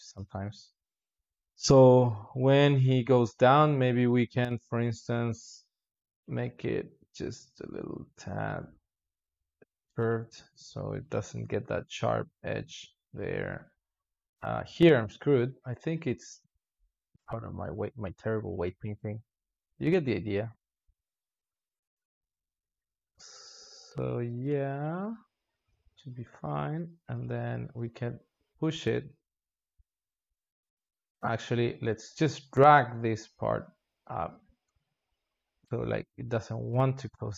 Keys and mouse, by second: 0.8-1.2 drag, 1.2 alt+shift+z, 1.8-6.0 drag, 6.0 g, 10.1-13.5 drag, 13.5 g, 16.3 g, 19.8-21.2 drag, 21.2 alt+shift+z, 21.9 g, 24.5-25.7 drag, 25.7 alt+shift+z, 26.3 g, 29.3-30.9 drag, 34.6-37.3 drag.